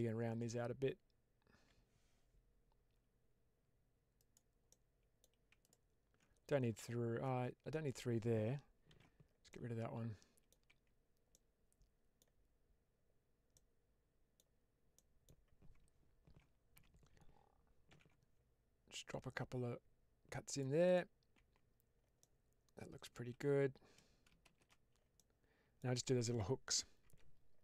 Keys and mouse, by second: 4.1 click, 4.6 middle click, 5.5 alt+click, 8.8 ctrl+x, 9.4-10.4 middle drag, 10.6 Tab, 11.2-12.1 middle drag, 13.4-14.3 middle drag, 14.8-15.2 middle drag, 16.6 Tab, 17.8 ctrl+r, 20.7 click, 21.3 Tab, 22.1-23.1 middle drag, 24.6 shift+space, 25.1-25.7 middle drag, 26.9 Tab.